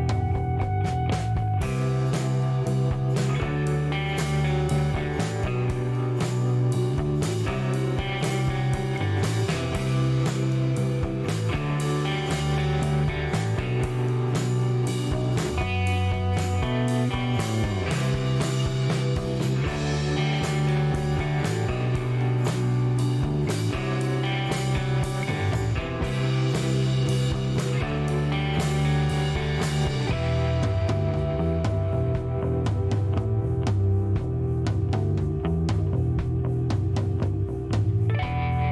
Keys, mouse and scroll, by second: 1.0 shift+right click, 3.8 middle click, 4.3 shift+right click, 5.6 click, 6.7 click, 7.7-8.2 scroll up 4, 8.6 middle click, 8.9 scroll up 1, 13.0 click, 15.1 click, 17.2 click, 18.0 right click, 19.7 click, 21.9 click, 27.2 click, 28.4 click, 29.9 click, 31.4 8, 32.6 click, 33.9 click, 35.4 click, 37.5 scroll up 2.